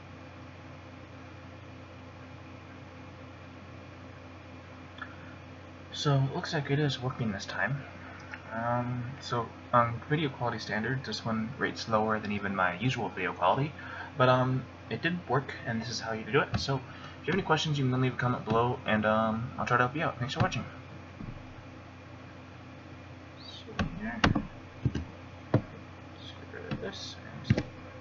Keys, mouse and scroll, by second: 18.8 click, 24.8 F7, 27.0 click, 27.5 F12.